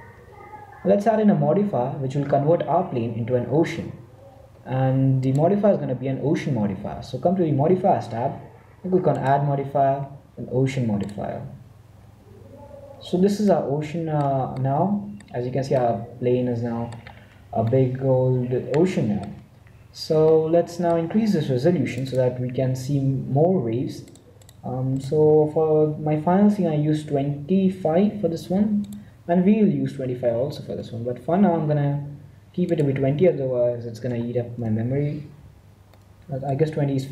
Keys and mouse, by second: 5.0-7.0 drag, 9.0-11.0 drag, 12.4-13.5 middle drag, 19.7 middle click, 21.8-23.8 drag, 23.9-26.7 drag, 28.8-30.5 drag, 33.0-34.6 drag, 36.1-37.1 middle drag.